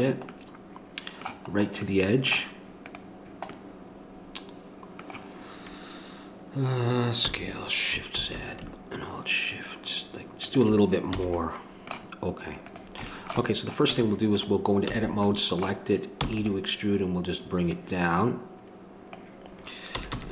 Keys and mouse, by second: 2.8-10.4 right drag, 11.2 a, 12.6 right click, 13.8 Tab, 14.2 click, 14.9 a, 16.2 e, 17.7-19.1 drag, 19.9 a, 20.1 a.